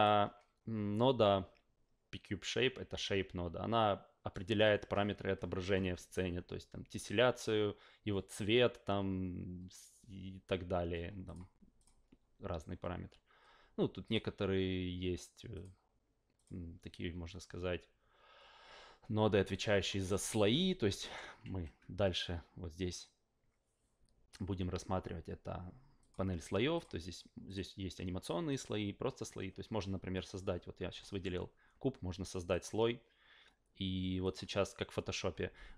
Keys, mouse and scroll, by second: 11.2 click, 11.8 click, 14.0 click, 15.5 click, 16.3 click, 19.5 click, 21.0 alt+middle click, 21.4 ctrl+a, 26.0 click, 26.7 click, 27.5 click, 28.5 click, 31.0 alt+middle drag, 32.5 click, 34.2 click.